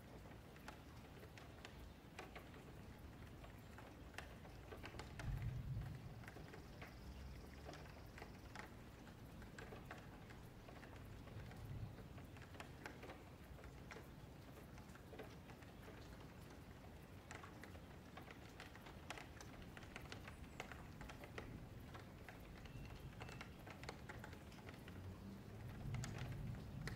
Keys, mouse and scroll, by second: 0.2 shift+click, 0.9 click, 1.2 shift+click, 2.0 j, 2.2 shift+middle click, 3.0-3.4 scroll down 1, 3.4 shift+middle click, 4.1 ctrl+r, 5.1 scroll up 1, 5.5 click, 5.8 shift+click, 6.6 j, 7.0-8.3 shift+middle drag, 8.3 ctrl+r, 9.4 1, 9.6 click, 10.1 shift+click, 10.6 j, 10.9 middle click, 11.1-11.7 scroll down 1, 11.7 ctrl+r, 13.3 click, 13.8 ctrl+z, 14.0 ctrl+z, 15.3 ctrl+r, 16.1 click, 16.4 shift+click, 17.5 click, 17.7-18.5 scroll up 1, 18.5 click, 18.9 shift+click, 19.6 click, 20.3-21.6 middle drag, 21.6-22.1 scroll up 1, 22.1-22.8 scroll down 3, 22.8-23.3 scroll down 2, 23.3 Tab, 23.4-23.9 scroll up 2, 23.9 click, 24.1 Tab, 24.7 alt+click, 25.1 middle click, 25.9-26.4 scroll down 10, 26.4-26.9 middle drag.